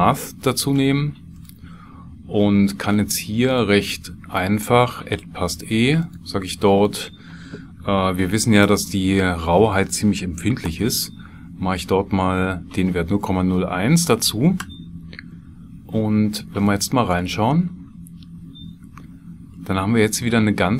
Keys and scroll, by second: 8.6 BackSpace, 10.6 KP_0, 11.6 KP_1, 14.6 KP_Enter.